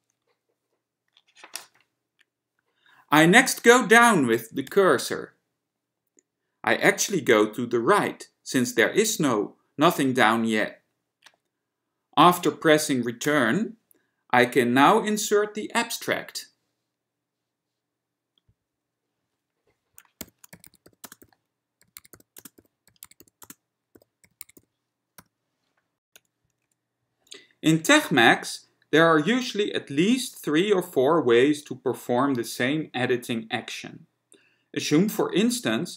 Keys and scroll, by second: 0.0-0.1 typing, 4.8 Down, 13.4 Return, 20.2-25.4 typing, 26.2 Right.